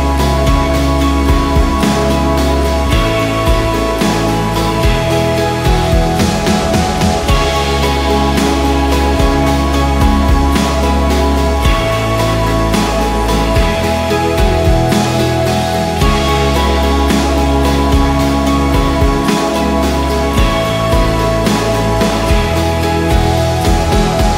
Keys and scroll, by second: 0.8 e, 1.2 Escape, 1.6 F2, 2.8 F3, 5.3 ctrl+z, 8.3 ctrl+r, 9.4 ctrl+r, 18.6 Escape, 19.6 c, 19.7 e, 20.1 shift+F2, 20.4 F3, 22.5 Escape, 23.2 alt+w, 23.8 p.